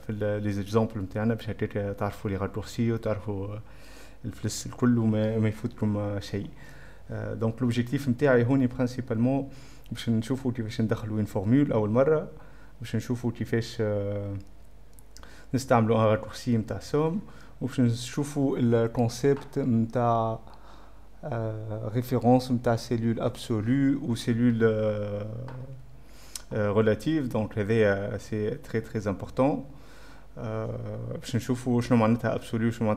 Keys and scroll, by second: 5.8-7.9 typing, 19.1 6, 19.1 F2.